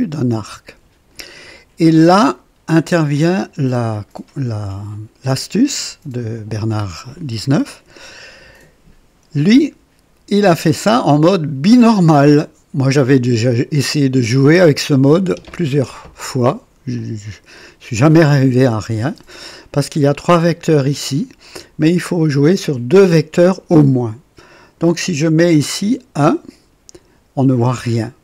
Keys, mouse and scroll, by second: 2.2-3.1 drag, 4.3 click, 11.7 click, 13.2-14.5 drag, 17.0-18.4 drag, 24.5 click, 25.8 scroll up 2.